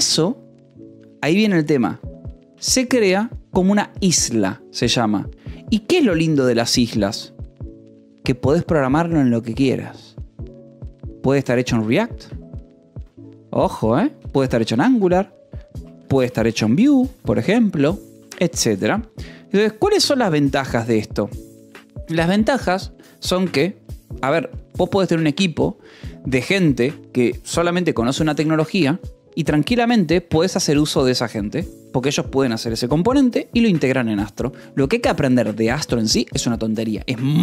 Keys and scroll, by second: 2.3 a, 2.5 BackSpace, 2.9 space, 5.8 Return, 6.1 Tab, 6.3 space, 6.7 BackSpace, 6.9 -, 7.0 space, 11.4 e, 11.8 t, 12.1 Escape, 12.9-18.5 typing, 17.4 Escape, 20.0 k, 24.4 j, 28.6 j, 30.6-31.5 typing.